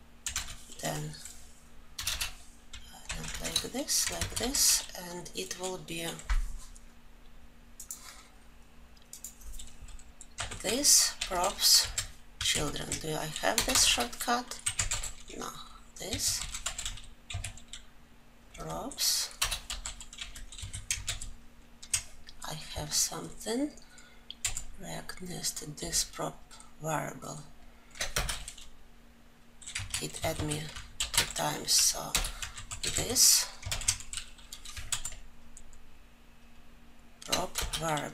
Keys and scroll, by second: 13.0 ctrl+j, 21.4 ctrl+j, 28.5 Return.